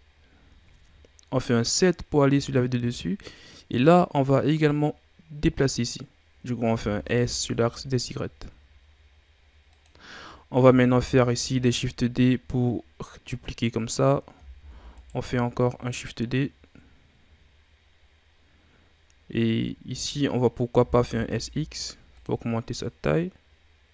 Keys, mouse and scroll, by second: 2.5-3.4 scroll up 1, 3.4-5.5 scroll up 1, 6.7 s, 10.8 shift+d, 12.1-14.5 drag, 14.5 shift+d, 15.6-18.6 drag, 20.7 s, 22.8-23.9 drag.